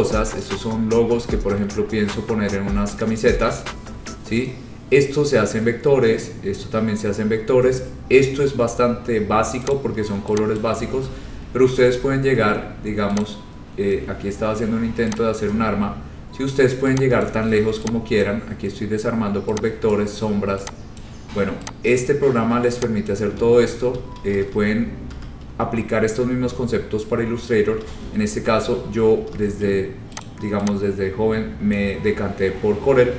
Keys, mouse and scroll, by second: 1.3-2.9 scroll, 3.2 scroll, 3.9 scroll, 4.5 scroll, 5.3-9.3 scroll, 9.8 click, 10.7 click, 11.2 ctrl+z, 13.3 click, 13.9-14.5 scroll, 15.3 click, 15.8-16.3 scroll, 17.3 click, 18.3 click, 18.9 scroll, 20.1 click, 21.1 click, 22.0 click, 23.2 click, 23.7 ctrl+z, 24.1 ctrl+z, 24.3 ctrl+z, 24.4 ctrl+z, 24.6 ctrl+z, 25.2 ctrl+z, 26.3 scroll down 3, 26.8 scroll up 2, 27.0 scroll, 28.0 ctrl+z, 29.4 ctrl+z, 30.4 click, 31.9 click, 32.2-32.9 scroll.